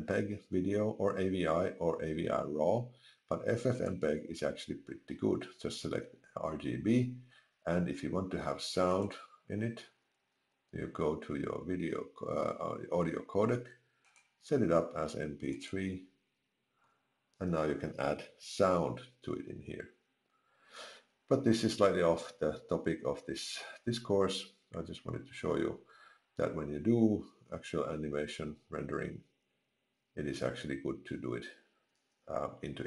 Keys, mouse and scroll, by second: 17.4 click.